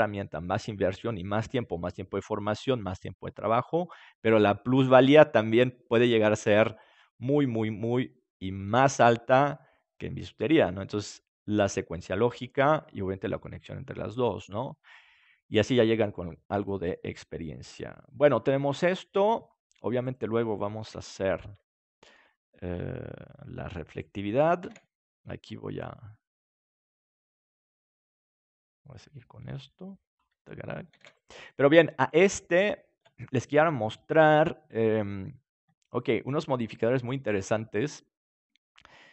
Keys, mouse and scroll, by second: 15.2-17.0 middle drag, 20.0 right click, 20.8 KP_7, 21.4 right click, 21.8-23.9 middle drag, 24.6 shift+d, 30.1-31.9 drag, 30.9 ctrl+s, 31.9-33.4 right drag.